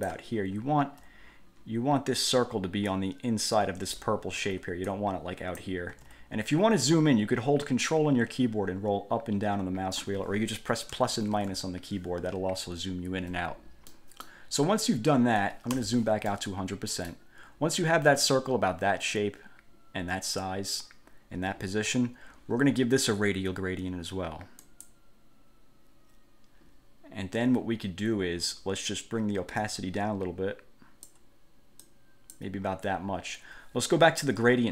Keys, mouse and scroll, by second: 0.5-1.1 ctrl+scroll up 2, 3.0-4.3 drag, 4.5 ctrl+z, 5.1 ctrl+click, 6.1 ctrl+z, 6.7-7.1 ctrl+scroll down 2, 8.4-8.9 ctrl+scroll up 2, 8.9-9.3 ctrl+scroll down 2, 9.4-9.7 ctrl+scroll up 2, 9.7 ctrl+scroll down 2, 11.1 =, 11.3 -, 11.5 =, 11.7 -, 14.1 click, 15.9 1, 16.5-17.5 drag, 24.8 click, 29.8-31.4 drag, 32.0 click.